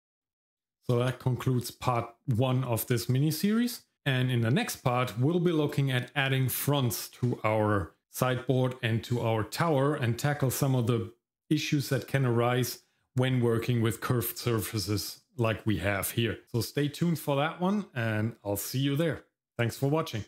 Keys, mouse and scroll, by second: 0.2 middle click.